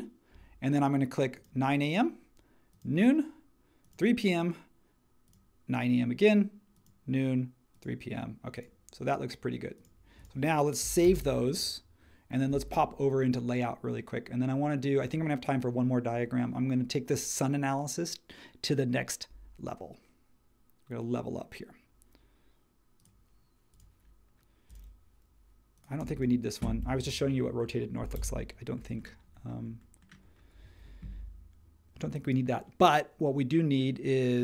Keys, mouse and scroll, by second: 11.0 super+s, 28.1 BackSpace.